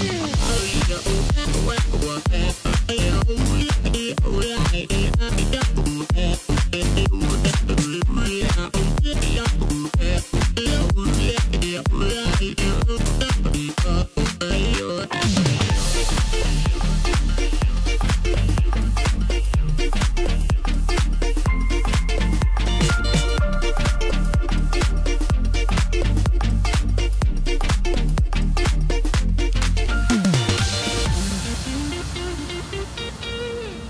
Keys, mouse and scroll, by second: 0.1 KP_1, 0.7-1.5 scroll up 1, 1.5 s, 2.3-3.0 scroll up 4, 3.0 s, 5.6 Tab, 5.9 scroll up 3, 6.1 scroll down 3, 6.4 middle click, 7.2 3, 7.7 click, 8.1-9.1 scroll up 1, 9.1 s, 11.4 KP_1, 12.3 scroll up 2, 12.6 middle click, 13.4 click, 14.2 KP_1, 14.8-15.4 scroll down 2, 15.4 s, 16.8 Tab, 17.8 ctrl+a, 18.8-19.1 scroll up 1, 19.1-19.6 scroll down 1, 19.6 Tab, 20.1 middle click, 21.0 click, 22.2 KP_1, 23.2 ctrl+b, 27.5 click, 28.6 middle click, 29.4 click, 30.1 KP_1, 31.8 s, 33.3 ctrl+b.